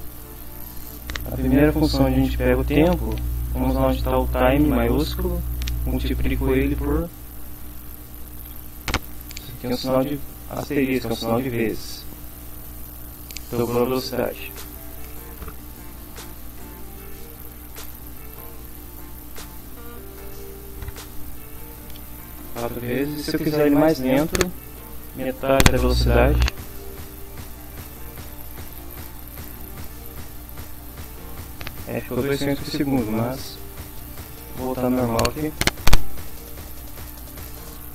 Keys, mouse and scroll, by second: 0.4 Left, 2.1 Left, 2.8 Right, 3.5 Right, 4.1 Left, 6.2 shift+8, 7.5-8.9 typing, 15.0 click, 15.9 Delete, 16.3 4, 24.0 Left, 24.3 Delete, 26.2 Right, 26.6 Delete, 27.0 5, 36.0-37.5 typing.